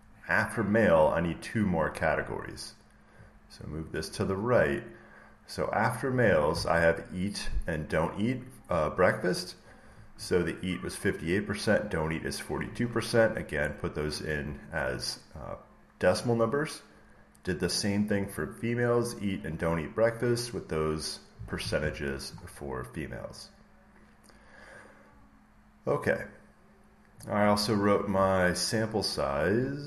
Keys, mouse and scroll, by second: 5.9-7.8 drag, 18.0-20.1 drag, 27.0 click, 27.5 scroll, 28.6 scroll.